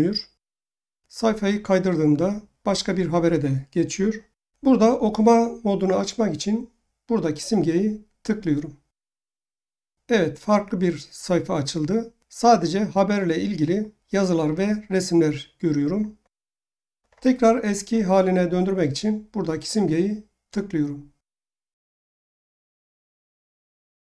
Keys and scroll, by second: 4.3 Home.